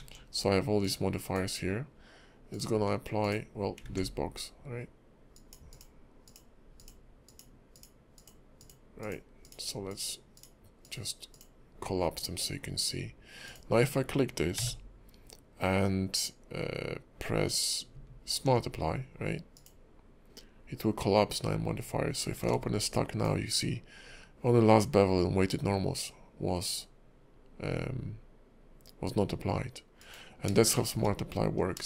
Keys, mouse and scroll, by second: 3.2 click, 3.8 ctrl+`, 14.5 q, 22.4 ctrl+`, 30.8 shift+middle click, 31.1-31.8 scroll up 4.